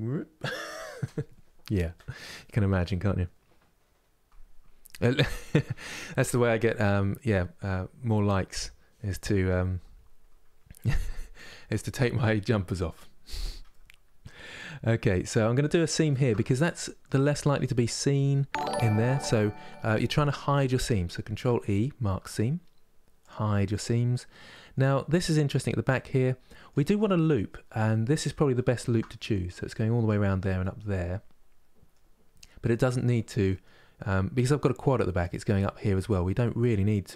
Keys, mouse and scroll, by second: 13.4-15.7 middle drag, 15.7 alt+click, 16.1-20.0 middle drag, 20.9 ctrl+e, 23.3-28.4 middle drag, 28.4 alt+click, 28.8-37.1 middle drag.